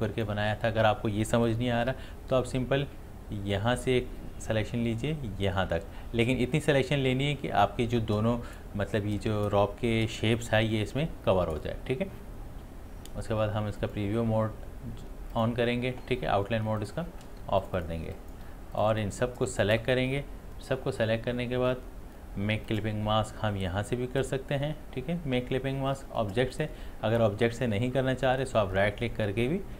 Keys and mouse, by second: 1.7 ctrl+z, 3.9-8.9 drag, 13.8 click, 17.4 space, 17.6 ctrl+alt+click, 18.0 ctrl+alt+space, 19.3-21.8 drag, 22.7 click, 28.3 right click.